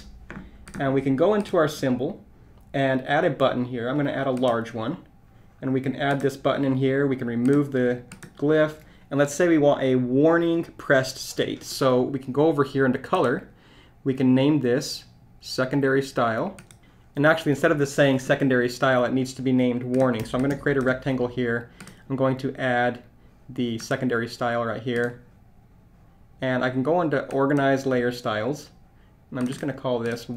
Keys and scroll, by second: 20.5 shift+r.